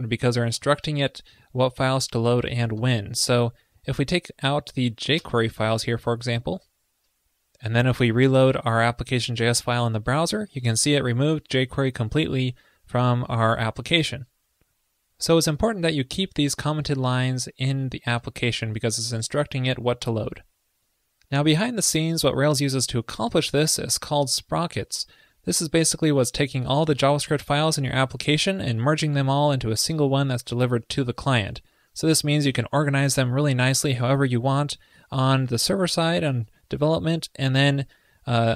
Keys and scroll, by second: 5.6 super+s, 9.5 super+r, 16.6 super+z, 18.6 super+s.